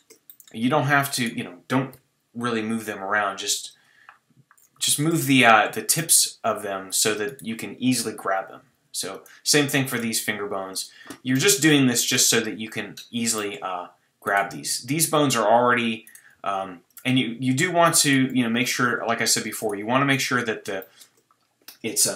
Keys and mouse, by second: 1.9 KP_3, 2.6 g, 8.1 KP_3, 8.7 g, 10.2 g, 12.4 g, 14.5 g, 16.4 g, 18.3 g.